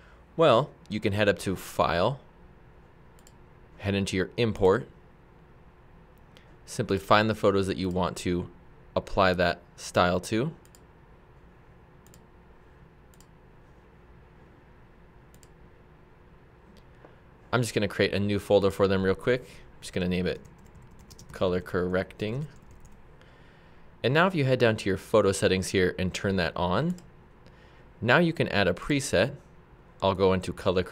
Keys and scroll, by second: 20.1-23.3 typing.